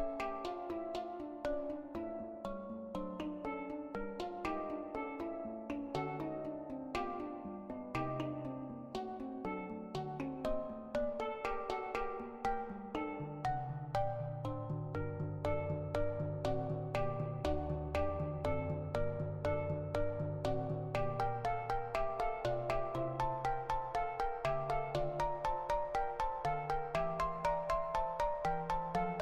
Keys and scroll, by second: 12.3-13.1 typing, 15.5 Delete, 21.0 ctrl+v, 21.7 -.